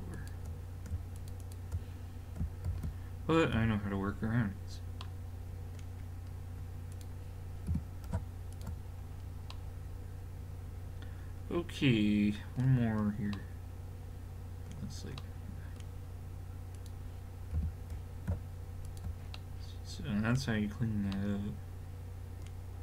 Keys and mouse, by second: 2.7 alt+m, 3.3-4.4 drag, 4.4-5.2 middle drag, 6.9 click, 7.7 g, 12.9 middle click, 16.8 right click, 17.6 g, 18.9 click, 19.6 middle click, 21.2 middle click, 21.9-22.8 middle drag.